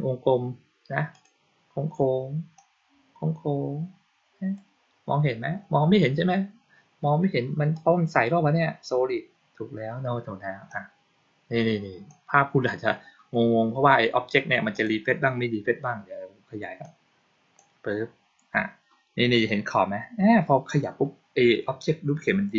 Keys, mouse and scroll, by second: 1.0 click, 2.4-4.4 drag, 7.6 click, 10.6-12.0 drag, 14.6 click, 16.7 click.